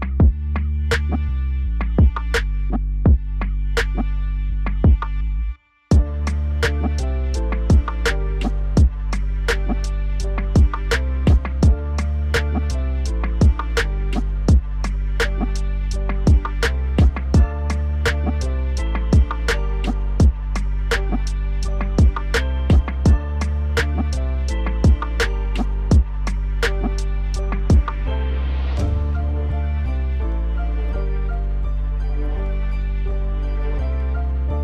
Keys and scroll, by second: 6.9 F4, 19.2 alt+w, 32.7 alt+w.